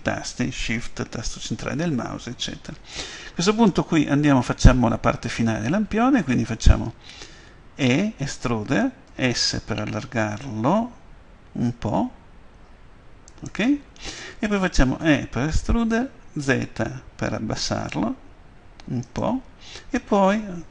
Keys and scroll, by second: 9.0 s, 12.1 s, 15.0 f, 16.4 z.